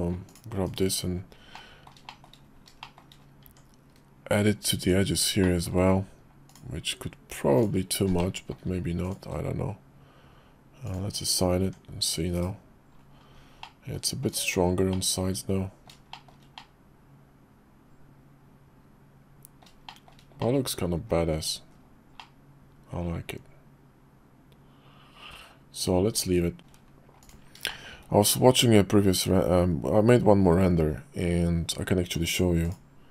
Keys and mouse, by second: 0.3 click, 0.7 /, 1.5 middle click, 2.1 shift+middle click, 2.8 click, 3.4 Tab, 4.8 click, 5.4 middle click, 7.5 alt+shift+click, 8.2 middle click, 9.0 alt+shift+click, 11.3 click, 11.6 Tab, 12.4 /, 13.6 middle click, 14.3 middle click, 14.9 middle click, 16.1 shift+middle click, 16.6-19.6 middle drag, 19.9 shift+middle click, 20.4 middle click, 21.1 KP_5, 21.7 KP_5, 22.2-26.6 middle drag, 27.2 click, 27.7 shift+click.